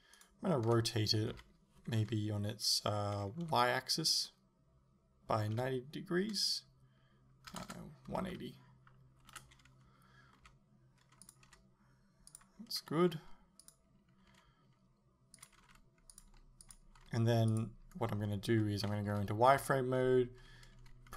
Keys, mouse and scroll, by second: 0.3 right click, 0.8 r, 10.5 r, 11.3 click, 11.5 g, 12.4 click, 13.2 g, 13.7 click, 14.4 g, 15.5 click, 15.7 r, 16.3 g, 16.8 click, 17.0 g, 17.6 click, 19.1 z, 19.6 a.